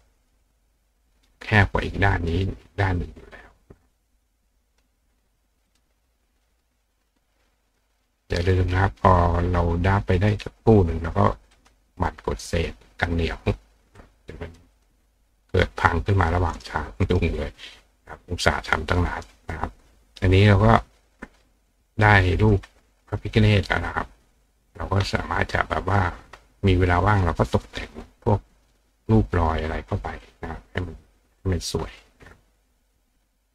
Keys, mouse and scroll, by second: 1.0-2.3 drag, 3.0 click, 5.7 click, 6.9 click, 9.2-10.3 drag, 11.6 click, 12.5 click, 14.0 click, 14.8 click, 16.2 click, 16.5 right click, 17.1 right click, 21.3-22.5 drag, 25.4 click, 28.0 click, 29.4 click, 30.2-31.4 drag, 32.9 click.